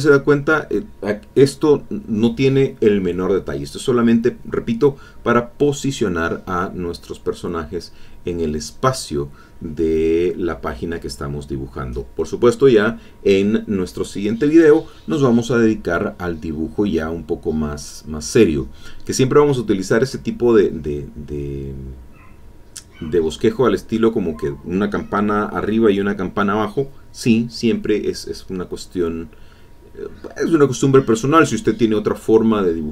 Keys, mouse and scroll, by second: 0.1 click, 1.7 click, 4.4-6.1 drag, 6.6-8.7 drag, 9.1-10.5 drag, 11.0 click, 11.3 e, 11.3-13.2 drag, 13.1 e, 13.3-14.5 drag, 15.0-16.3 drag, 16.5-17.8 drag, 19.2 click, 20.2-27.8 drag, 27.9-29.0 drag, 29.6 middle click, 29.7 click, 30.9 click, 31.1 middle click.